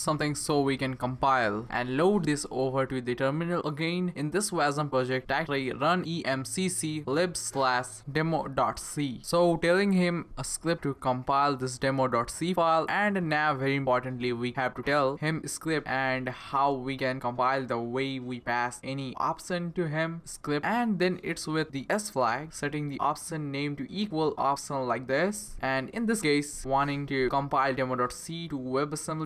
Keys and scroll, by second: 5.5-9.8 typing, 11.1-18.9 typing, 23.5 typing.